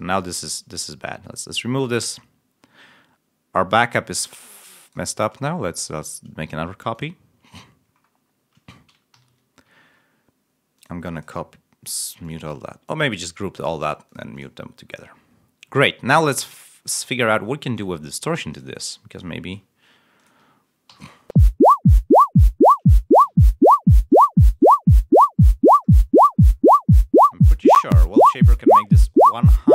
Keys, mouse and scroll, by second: 0.6 click, 1.7 click, 2.1-3.1 scroll up 3, 3.4 scroll down 1, 7.8-8.1 scroll down 2, 8.1 scroll up 2, 9.1 ctrl+Up, 10.7 click, 11.1 click, 12.2 click, 14.7-15.1 scroll up 1, 15.3-16.4 scroll down 3, 17.7 click, 18.4 click, 18.8 click, 20.1 click, 20.8 +, 21.2 l, 23.2 7, 24.0 click, 24.4 right click, 25.8-26.4 scroll down 2, 27.4 click, 29.5 click.